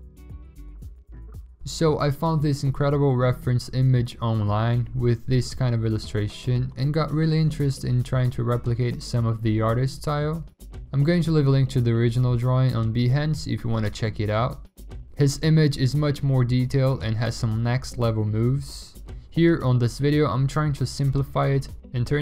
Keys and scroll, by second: 0.7 ctrl+alt+z, 1.8-3.4 typing, 4.1 ctrl+x, 5.0 ctrl+shift+v, 7.8 v, 9.0-9.9 v, 10.4 ctrl+i, 11.3 ctrl+u, 14.2 v, 15.6 v.